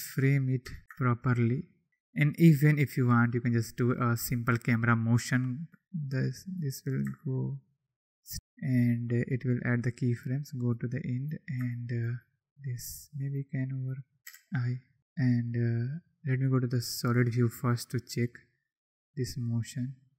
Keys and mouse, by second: 0.9-1.9 shift+drag, 3.2-3.9 drag, 6.5 click, 10.0-10.5 drag, 10.6-11.0 drag, 12.9 click, 13.8 click, 14.2 i, 15.0 a, 15.0 click, 16.8 click, 18.2 click.